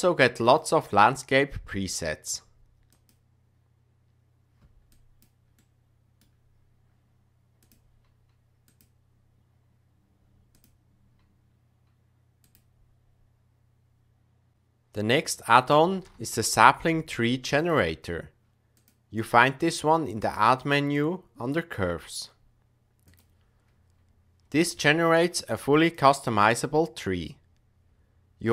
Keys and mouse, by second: 0.4-4.9 drag, 5.0 click, 5.7 middle click, 7.6-9.1 drag, 10.5-12.7 drag, 18.7 click, 20.2-23.1 drag, 24.7 shift+middle click, 25.4 typing, 25.9 click.